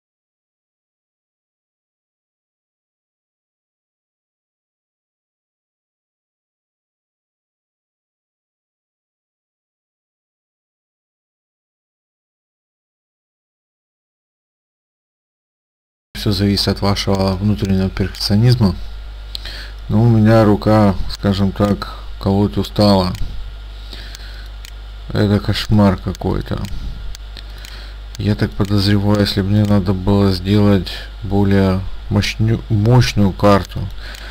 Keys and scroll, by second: 2.4 ctrl+a, 2.7 space, 10.6 ctrl+z, 12.3 ctrl+space, 14.3 ctrl+space, 14.5 ctrl+a, 15.2 space.